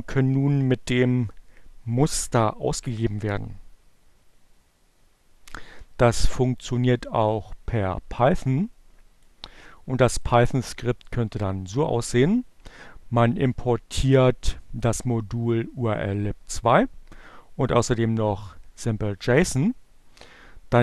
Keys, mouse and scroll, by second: 3.4-6.2 drag, 6.9 click, 10.6 click.